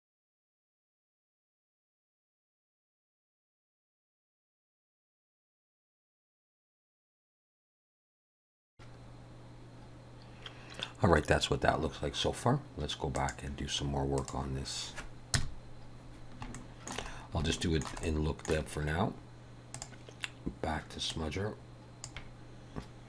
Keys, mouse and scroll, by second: 6.0 click, 6.5 click, 6.7 click, 7.0 click, 7.9 click, 8.0-8.4 scroll down 12, 8.4 click, 9.0 F12, 14.2 click, 15.4 KP_0, 16.6 shift+middle click, 17.2 scroll up 2, 17.6 shift+middle click, 18.1 middle click, 19.8 click, 21.2 click.